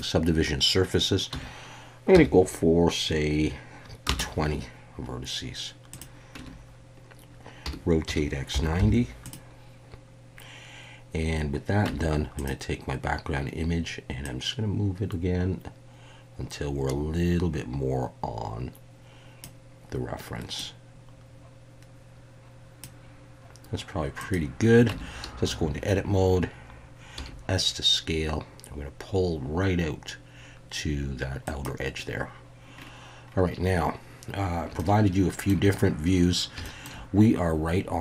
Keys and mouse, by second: 6.4 Tab, 7.6 r, 8.0 x, 8.5 8, 8.8 9, 9.2 click, 11.9 Tab, 12.4 click, 14.4-19.4 drag, 20.6-22.8 drag, 24.2 click, 24.9 Tab, 27.2 s, 31.5 click, 34.8 shift+middle click, 36.6 shift+middle click.